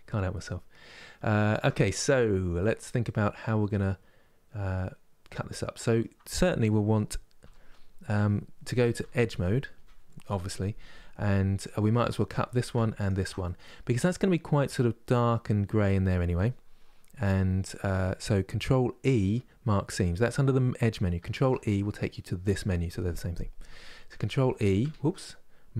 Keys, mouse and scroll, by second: 2.0-2.5 scroll up 2, 2.5-7.1 middle drag, 7.1 3, 11.2 alt+click, 11.7 middle click, 12.6 alt+shift+click, 13.1-16.1 middle drag, 20.9 ctrl+e, 22.1-24.5 drag, 24.5 ctrl+e.